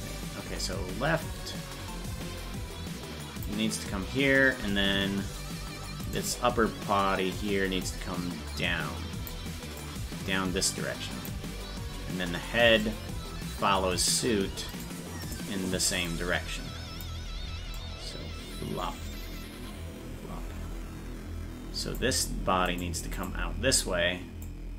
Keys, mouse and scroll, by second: 6.1 right click, 7.8-9.3 drag, 9.8-11.2 drag, 12.8-14.0 drag, 14.8-16.0 right drag, 16.0 click, 17.7-21.9 drag, 22.7-24.4 right drag, 24.4-24.7 drag.